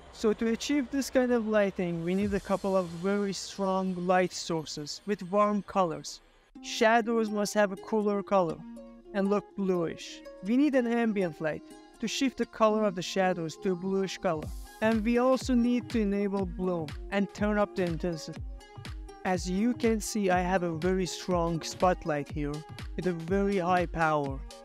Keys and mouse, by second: 3.6 middle click, 4.1-4.5 shift+middle drag, 4.6 middle click, 5.5 click, 7.1 middle click, 7.7 ctrl+middle click, 8.0 middle click, 8.6 z, 9.8-10.4 drag, 11.4 click, 12.0 click, 13.6 click, 14.9 ctrl+middle drag, 15.3 shift+middle click, 15.7 r, 17.8 Escape, 19.1 click, 20.6 KP_0, 22.5 ctrl+z, 23.7 ctrl+z.